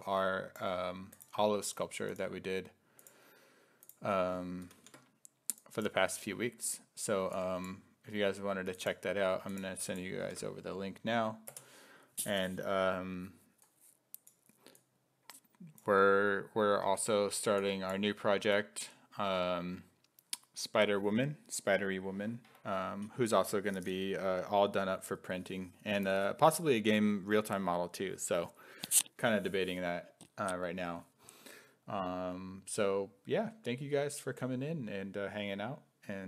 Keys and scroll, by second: 4.7 ctrl+c, 10.3 ctrl+v, 11.5 Return.